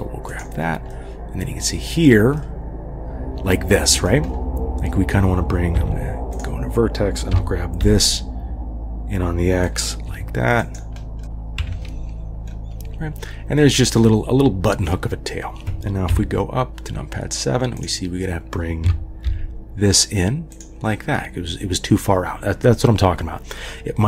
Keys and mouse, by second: 1.0-2.2 drag, 2.5-4.1 drag, 5.8 1, 6.4 drag, 7.3 g, 10.1 g, 11.2 g, 11.6 KP_3, 16.1 KP_7, 18.8 g.